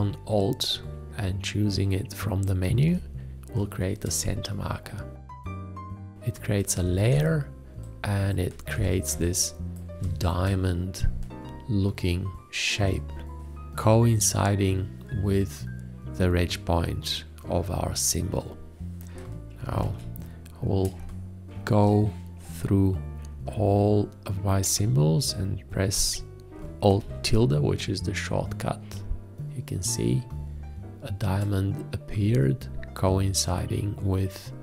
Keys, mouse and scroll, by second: 7.1 ctrl+space, 8.7 space, 19.8 ctrl+a, 21.0 space, 26.9 alt+`.